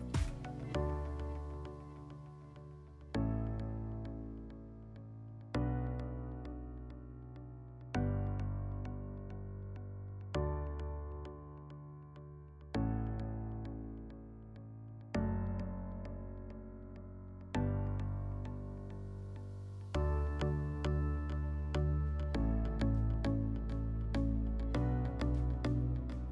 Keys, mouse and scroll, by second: 0.5 click, 1.7 click, 2.6 shift+click, 3.5 click, 4.5 click, 5.4 click, 5.5 click, 5.9 5, 6.5 click, 6.6 click, 6.7 5, 7.7 click, 9.7 click, 13.9 click, 14.9 click, 16.7 alt+middle click, 18.1 click, 19.3 click, 21.7 click, 22.4 click, 23.3 click, 24.3 click, 24.4 click, 25.2 typing.